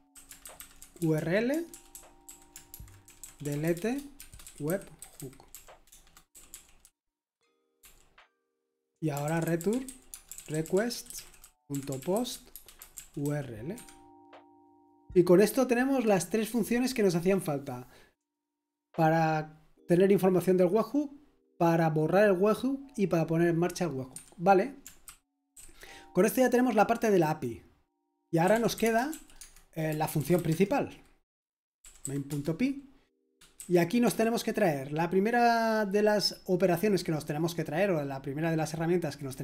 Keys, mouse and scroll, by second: 0.0-7.8 typing, 8.9-14.2 typing, 25.1-26.0 typing, 28.2-34.5 typing.